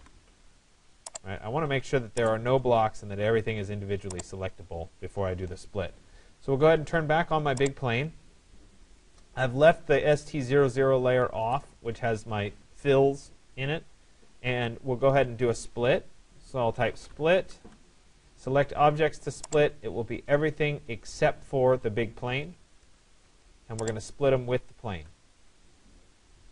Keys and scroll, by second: 17.2 Return, 22.5 Return.